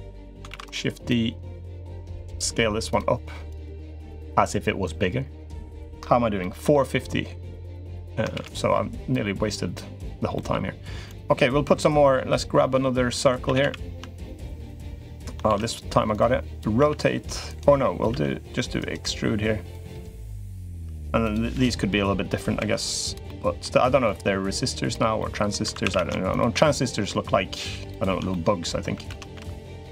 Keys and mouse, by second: 0.3 shift+d, 0.9-1.9 drag, 1.9 s, 3.2-5.6 drag, 6.2 middle click, 8.1 shift+d, 9.0 click, 10.1 middle click, 10.9 click, 13.0 2, 13.2 a, 13.4 a, 14.3 alt+shift+click, 15.3 shift+d, 15.9 click, 16.5 r, 17.9 e, 19.5-20.6 drag, 21.0 click, 21.3 l, 22.3 s, 23.0 middle click, 23.8 click, 25.0 middle click, 25.6 2, 25.6 a, 25.7 a, 26.4 middle click, 27.7 alt+shift+click, 28.1 middle click, 28.9 ctrl+z.